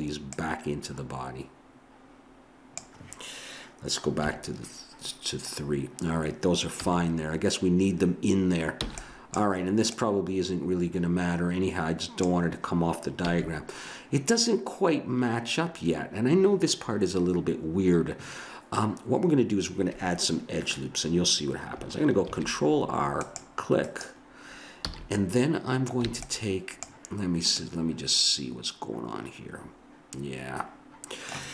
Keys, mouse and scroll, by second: 1.9 b, 4.2 KP_3, 6.8 a, 8.8 b, 9.9 click, 13.3 a, 22.2 ctrl+r, 24.8 a, 26.1 b, 30.1-31.2 middle drag.